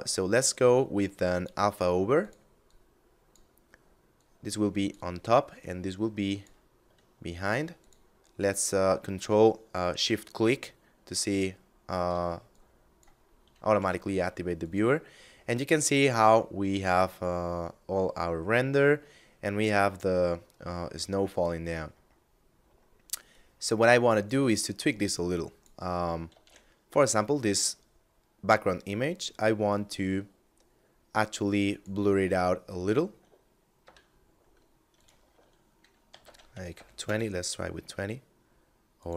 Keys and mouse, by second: 0.7 click, 7.2 ctrl+shift+click, 12.0 click, 12.7 middle click, 13.2 g, 14.0 click, 14.5 middle click, 20.9 middle click, 22.6 click, 25.7 shift+a, 31.1 click, 33.0 F9, 34.1 click, 35.2 2, 35.5 Tab, 35.8 2, 36.2 Return, 38.1 click, 39.0 1.